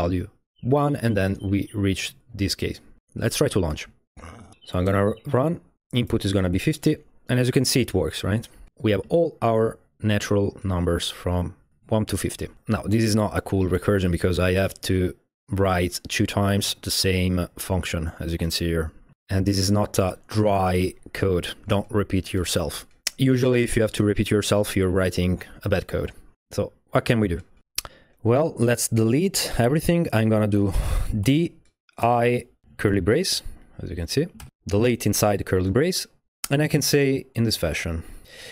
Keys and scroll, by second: 4.5 ctrl+l, 4.5 Tab, 4.9 Return, 6.0-6.8 typing, 28.0 Up, 28.1 Up, 30.2 Up, 31.2 d, 32.0 i, 32.9 alt+shift+è, 34.4 shift+o, 38.3-38.5 typing.